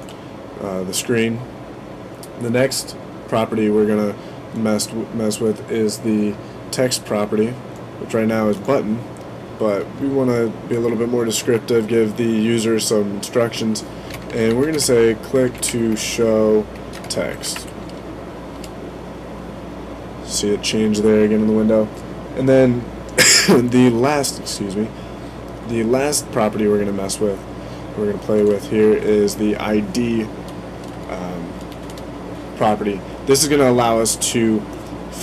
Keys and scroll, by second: 13.7-18.0 typing.